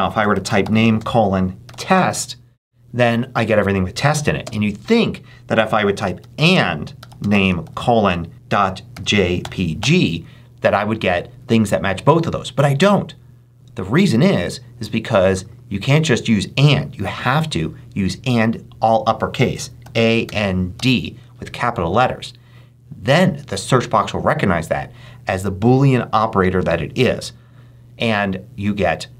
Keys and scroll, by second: 0.0-1.5 typing, 4.3 space, 5.7-10.2 typing, 19.5-21.1 typing.